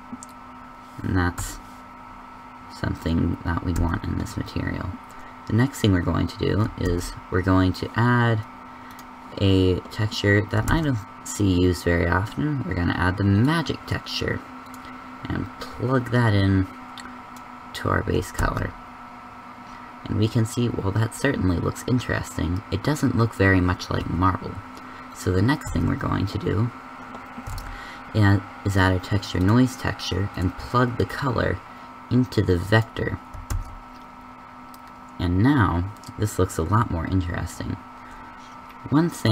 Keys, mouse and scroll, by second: 6.8 a, 6.8 shift+z, 11.1 shift+a, 18.3 shift+z, 24.8 g, 25.6 shift+z, 27.4 shift+a, 33.5 shift+z.